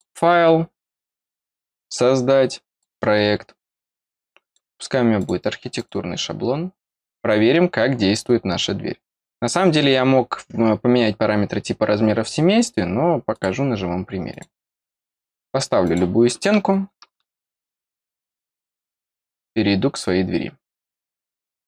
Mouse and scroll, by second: 1.8 click, 2.6 click, 4.4 click, 5.1 click, 5.7 click, 13.3 click, 14.2 click, 15.8 click, 16.7 middle click, 16.9 middle click, 18.5 click.